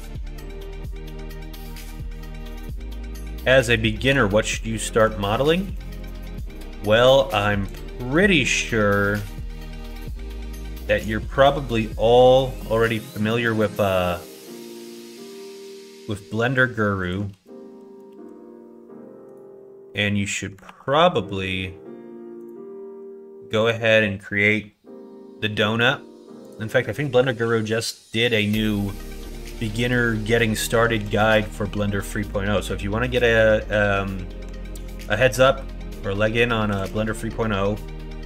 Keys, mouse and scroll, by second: 3.0 shift+click, 5.6 b, 10.7 b, 15.2 g, 17.3 ctrl+z, 18.0 ctrl+r, 20.6 ctrl+r, 26.4 click, 30.9 b, 36.7 b.